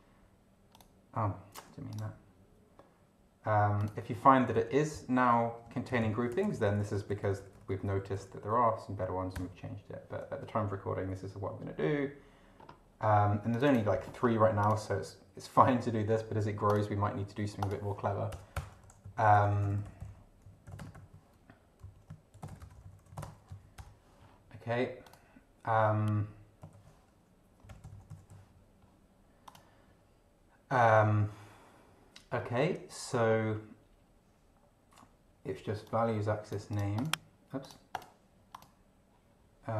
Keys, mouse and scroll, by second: 0.7 click, 1.9 click, 3.8 click, 4.5 Right, 4.9 Left, 6.3 BackSpace, 9.3 Return, 12.6 scroll up 1, 13.5 click, 14.2 scroll up 1, 14.6 click, 16.6 click, 17.6 click, 18.3 Return, 18.5-23.5 typing, 21.8 Right, 23.8 shift+Return, 25.1 click, 26.7 ctrl+f, 27.4-28.8 typing, 29.5 click, 32.4 scroll down 2, 33.2 scroll down 2, 35.9 click, 36.9 click, 37.6 click, 38.5 click.